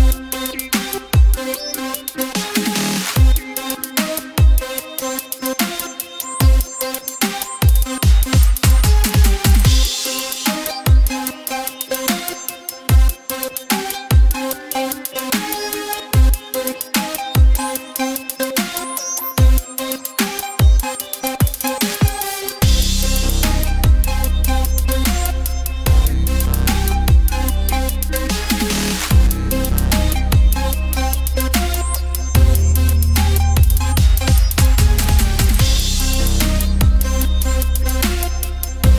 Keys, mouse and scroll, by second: 0.6 click, 1.7 click, 2.7 click, 3.3 ctrl+z, 3.7 click, 4.9 click, 6.1 click, 7.1 click, 8.7 click, 9.7 middle click, 10.8 middle click, 11.2 click, 12.3 ctrl+z, 12.7 middle click, 13.0 click, 14.0 ctrl+z, 14.2 click, 15.3 click, 16.3-17.3 drag, 18.8 middle click, 21.9-24.2 middle drag, 22.6 Tab, 24.9 KP_1, 26.0 click, 26.6 middle click, 27.4-28.8 middle drag, 28.9 click, 29.1 Tab, 29.5 Tab, 29.5 middle click, 32.2 middle click, 33.0 middle click, 33.5 middle click, 34.4 KP_1, 36.1 click, 37.8 middle click.